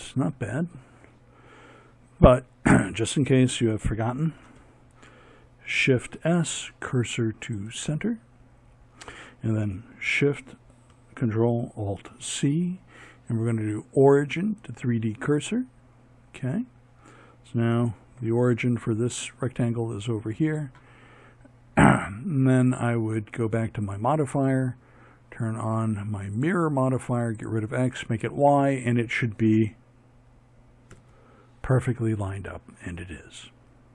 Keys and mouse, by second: 0.2-4.2 middle drag, 4.2 shift+s, 10.1 ctrl+alt+shift+c, 15.8-18.6 middle drag, 21.6-24.5 drag, 26.1 click, 29.0 ctrl+KP_3.